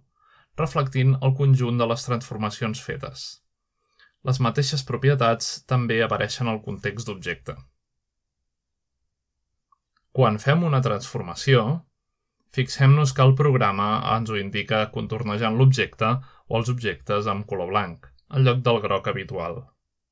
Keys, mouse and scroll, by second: 0.0-1.2 drag, 1.7-2.9 drag, 3.6-5.1 drag, 6.4 click, 8.3-10.5 drag, 11.1 click, 15.4-16.5 shift+middle drag, 17.4 r.